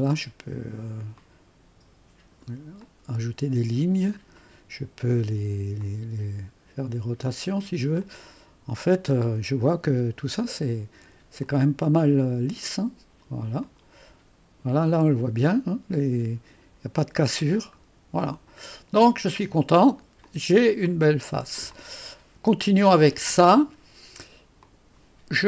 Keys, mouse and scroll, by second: 1.2-2.4 drag, 2.9-4.9 drag, 5.8-10.7 drag, 11.5-12.9 drag, 13.5 click, 13.7-21.6 drag, 21.1-21.8 scroll down 2, 21.8-23.1 drag, 24.6 click, 25.3 click.